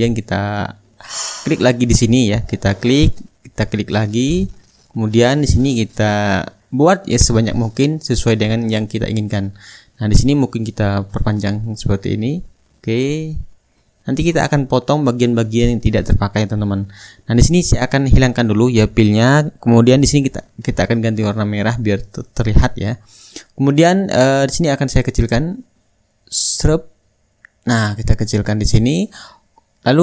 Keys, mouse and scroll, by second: 0.0 click, 0.2 click, 2.3-3.4 drag, 4.2-5.3 ctrl+drag, 8.9 ctrl+click, 9.6 ctrl+drag, 10.0 ctrl+drag, 10.4-11.0 ctrl+drag, 11.1 ctrl+click, 11.5 ctrl+click, 12.2 ctrl+click, 12.5 ctrl+middle click, 12.7 ctrl+click, 13.1-14.2 middle drag, 14.8-15.9 ctrl+drag, 16.0 Return, 16.5-17.9 middle drag, 18.9-20.1 drag, 21.4-22.5 shift+drag, 22.8-25.3 drag, 23.4 shift+right click, 24.6 right click, 25.7-30.0 ctrl+drag.